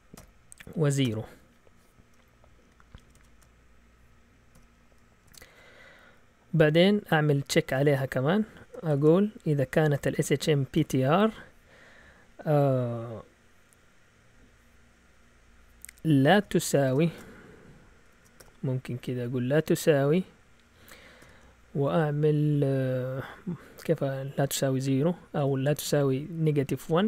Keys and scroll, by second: 0.0-1.0 typing, 2.7-3.5 typing, 4.5-5.2 typing, 5.2 Return, 7.5-11.3 typing, 16.3 =, 16.8 BackSpace, 17.0 !, 18.0 BackSpace, 18.3 =, 21.1 (.